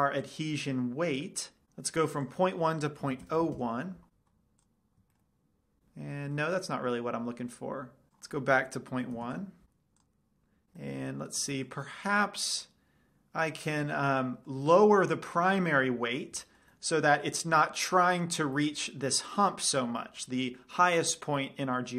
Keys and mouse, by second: 2.4 click, 4.9 middle click, 5.8 middle click, 8.3-9.7 drag, 11.2 middle drag, 11.4 middle drag, 11.6-12.3 middle drag.